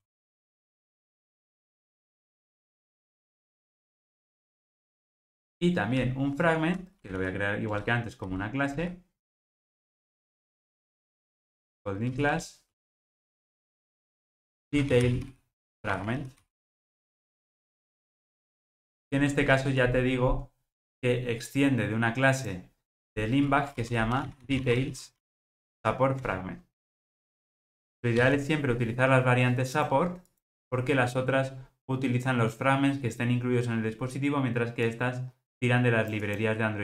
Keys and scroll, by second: 4.1 super+n, 26.3 Return.